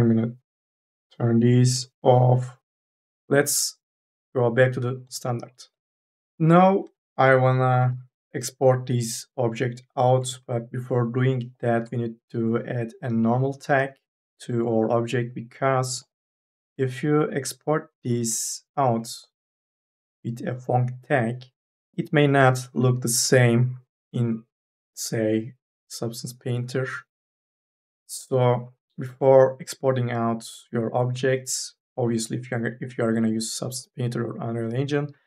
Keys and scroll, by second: 1.6 3, 7.5 4, 7.8 e.